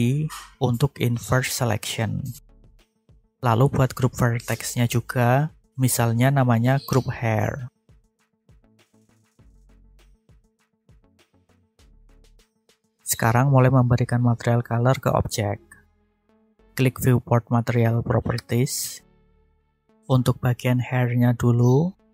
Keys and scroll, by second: 5.7 shift+h, 6.0 a, 6.1 i, 6.3 r, 7.1 Return.